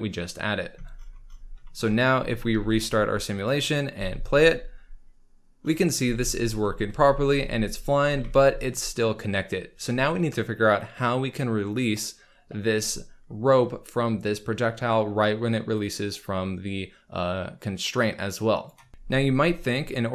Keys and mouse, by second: 2.5 ctrl+s, 3.3 click, 3.7 click, 3.9 space, 6.0 space, 6.9 space, 8.0 space, 8.2 z, 15.7 click.